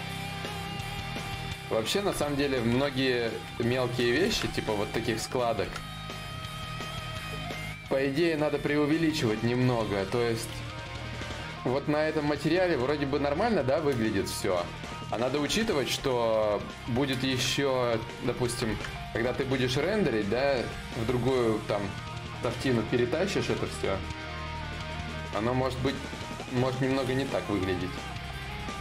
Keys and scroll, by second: 10.1 ctrl+z, 10.1 y, 22.2 b, 23.8-24.7 typing.